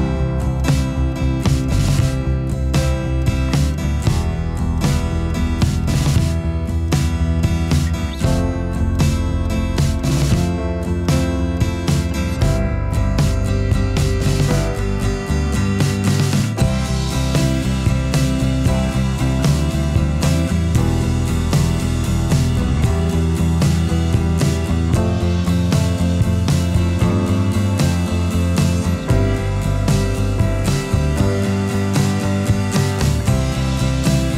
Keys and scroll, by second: 32.5 ctrl+0.